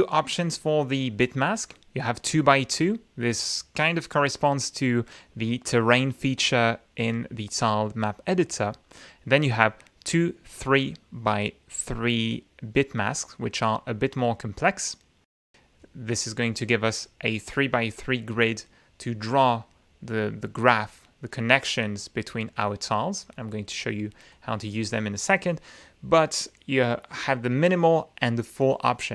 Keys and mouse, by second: 2.0 click, 2.7 click, 8.5-14.0 drag, 17.0-23.5 drag, 24.3 click, 27.1 click.